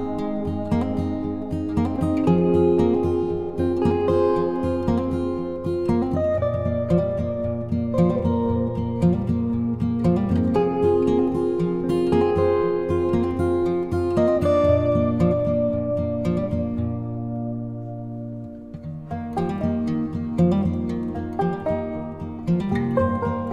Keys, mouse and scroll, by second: 4.9 click, 7.5-15.6 drag, 15.8 click, 18.6 ctrl+t, 20.3-23.5 alt+drag.